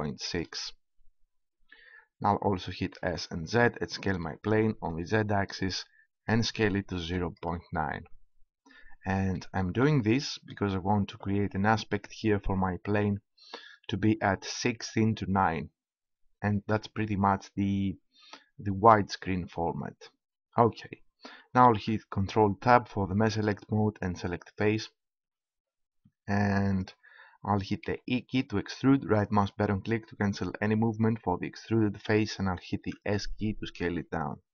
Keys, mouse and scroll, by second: 1.2-2.5 drag, 3.0 s, 7.3-11.8 drag, 21.6 ctrl+Tab, 27.4 right click, 27.8 e, 30.5-31.8 right drag, 32.6 s.